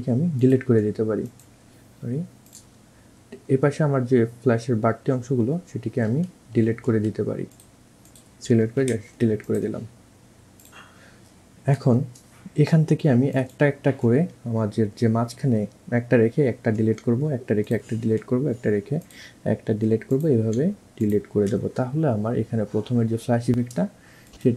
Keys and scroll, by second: 6.0 ctrl+z, 6.7 ctrl+z, 8.9 Delete, 16.8 Delete, 20.6 Delete, 21.6 Delete.